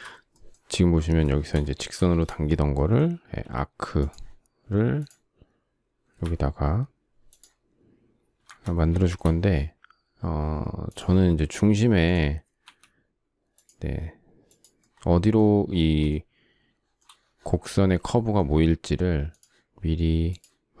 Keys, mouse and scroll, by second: 1.6 shift+middle click, 3.0 a, 5.8 Escape, 8.1 Escape, 8.7 shift+middle click, 12.3 Escape, 15.4 space.